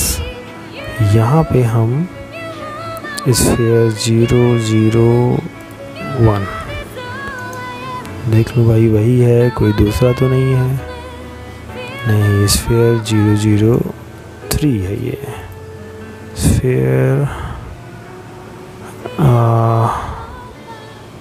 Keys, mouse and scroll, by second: 5.4 right click, 7.2 click, 11.3 right click, 13.1 click.